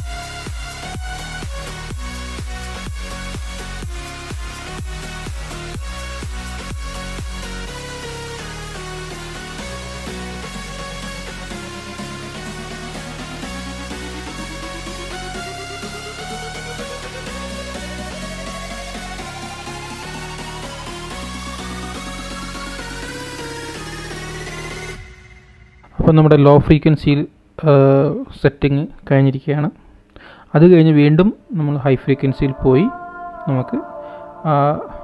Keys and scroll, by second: 2.5 alt+shift+super+?, 5.5 alt+shift+super+?, 8.8 alt+shift+super+?, 13.2 alt+shift+super+?, 15.7 alt+shift+super+?, 18.2 alt+shift+super+?, 21.0 alt+shift+super+?, 23.5 alt+shift+super+?, 27.7 alt+shift+super+?, 30.6 super+=, 30.8 super+=, 31.2 super+=, 32.0 super+-.